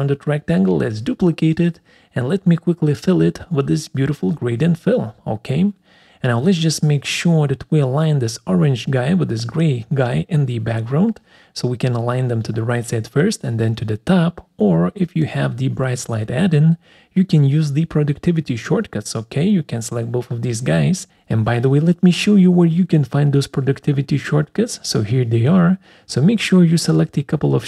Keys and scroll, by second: 4.7 ctrl+shift+c, 5.1 ctrl+shift+v.